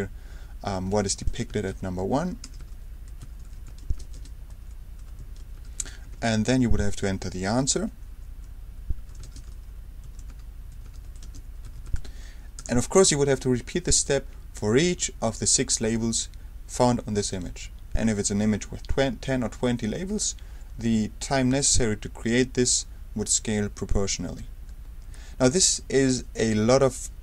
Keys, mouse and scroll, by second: 0.6-6.1 typing, 8.7-12.5 typing, 12.6 ctrl+Return, 25.4 Escape.